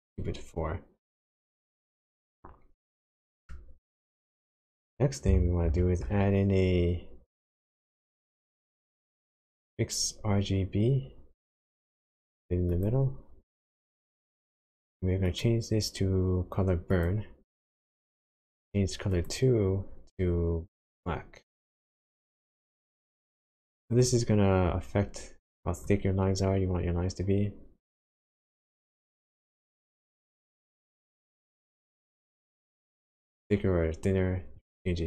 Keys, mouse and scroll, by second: 0.3-1.9 scroll down 3, 2.2-3.0 scroll down 2, 3.0 middle click, 3.9 click, 4.3 middle click, 5.1 scroll down 1, 5.7 shift+a, 15.3 click, 17.1 click, 19.2 click, 24.6-24.9 scroll up 4, 25.8 click.